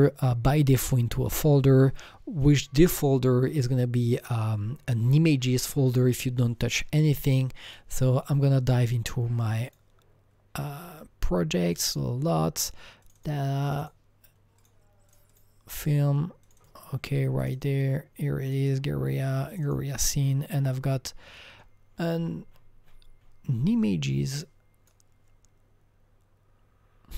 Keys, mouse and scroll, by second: 7.7 click, 9.7 click, 9.8 click, 11.7 click, 11.9 double click, 13.0 click, 13.2 double click, 13.7 click, 13.8 double click, 14.6 click, 15.1 click, 15.3 double click, 16.4 click, 16.6 double click, 17.4 click, 17.5 double click, 18.5 click, 18.6 double click, 18.7 double click, 19.5 click, 19.6 double click, 21.9-23.2 scroll down 10, 23.2-24.3 scroll up 7, 24.3-27.1 drag.